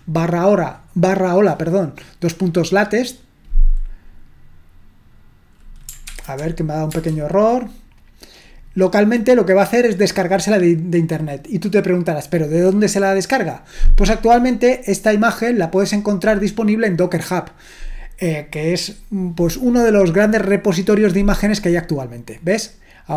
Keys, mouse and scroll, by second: 6.1 ctrl+p, 6.9 Return.